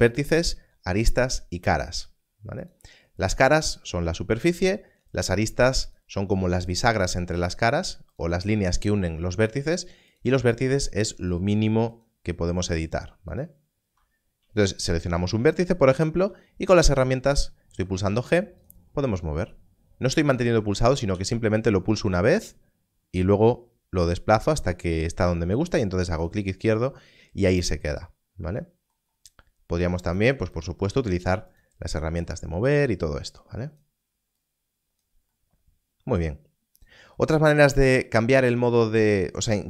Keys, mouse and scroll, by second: 2.5 alt+a, 6.9 click, 16.1 g, 18.5 g, 18.6 click, 22.9 g, 30.1 g, 30.5 shift+click, 31.4 click.